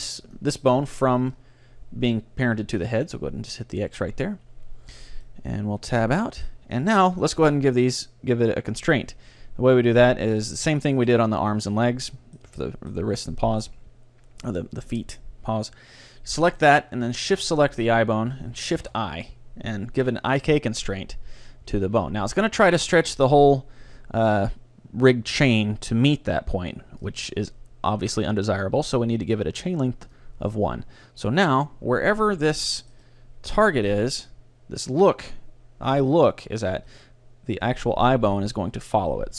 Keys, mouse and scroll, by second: 0.8-3.4 middle drag, 2.9-4.9 drag, 4.9 Tab, 5.3-9.3 middle drag, 10.5-12.9 right drag, 11.6-15.3 middle drag, 16.6-19.2 right drag, 18.8 shift+i, 27.1-28.9 drag, 30.1-32.0 drag, 31.3 middle click, 31.3-32.9 right drag, 32.0 middle click, 32.3 middle click, 32.5 click, 32.9-34.9 middle drag, 36.9 g.